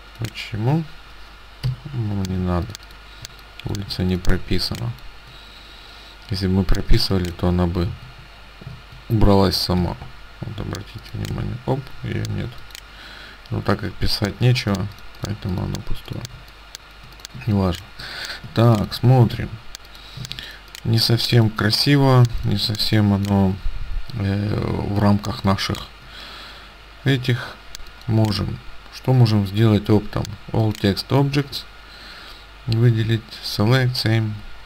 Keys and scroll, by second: 1.8 Delete, 2.7 ctrl+alt+space, 7.0 ctrl+space, 8.2 ctrl+z, 8.8 ctrl+z, 8.9 ctrl+z, 9.9 t, 17.4 space, 18.5 ctrl+space, 20.3 ctrl+space, 25.4 space.